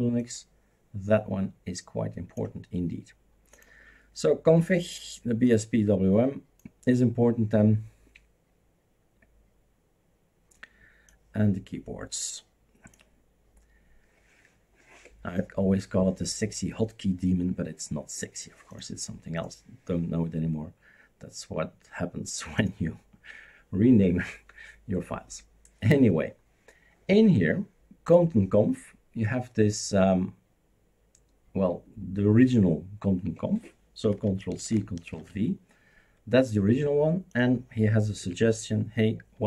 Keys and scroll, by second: 34.5 ctrl+c, 35.1 ctrl+v, 38.2 Delete.